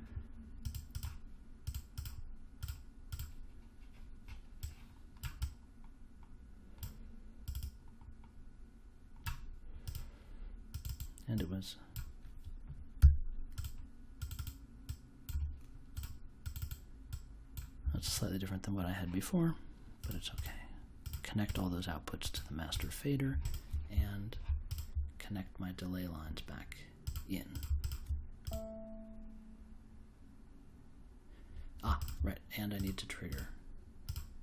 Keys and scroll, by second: 13.0 3, 15.2 2, 17.8 1.